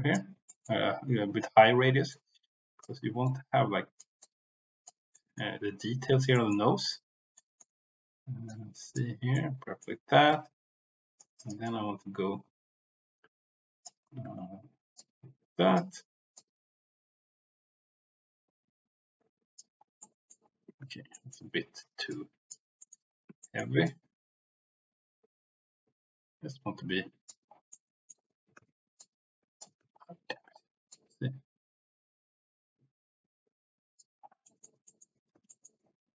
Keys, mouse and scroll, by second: 0.5 middle click, 2.0 click, 3.2 click, 4.2 click, 5.1 middle click, 6.3 middle click, 7.4 middle click, 8.4 click, 9.3 middle click, 10.2-11.3 drag, 11.1 right click, 11.6-13.8 drag, 14.2 ctrl+z, 14.9 click, 16.3-19.5 drag, 20.0 middle click, 20.8 ctrl+z, 21.1 middle click, 22.1 click, 22.8 middle click, 23.4 shift+middle click, 23.8-27.3 drag, 27.7 middle click, 28.5 ctrl+z, 29.0-29.6 scroll up 1, 29.7 ctrl+z, 30.8 scroll up 1, 30.9-34.0 drag, 34.4 middle click, 34.8 middle click, 35.3 ctrl+z, 35.4 middle click.